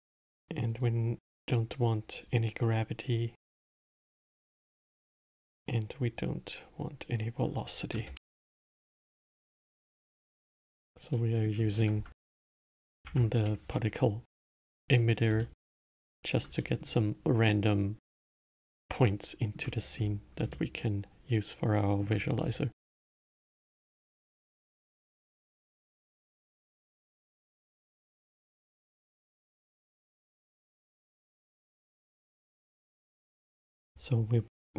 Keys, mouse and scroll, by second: 1.0-5.6 drag, 5.7-10.5 drag, 10.5 click, 11.5-13.4 middle drag, 13.4 shift+Left, 14.9 scroll up 2, 15.7-20.3 alt+middle drag, 20.3-20.9 scroll down 2, 20.9-22.7 alt+middle drag, 22.7-23.3 scroll up 1, 23.3-27.1 middle drag, 27.1-27.8 scroll up 1, 27.8-30.8 middle drag, 32.6-33.9 middle drag, 33.9 shift+a.